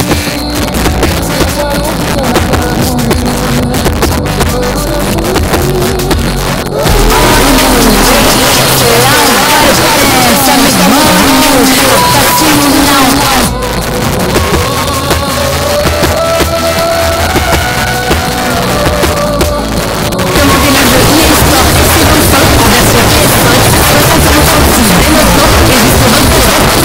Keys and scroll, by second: 13.1 Page_Down, 26.5 Page_Down.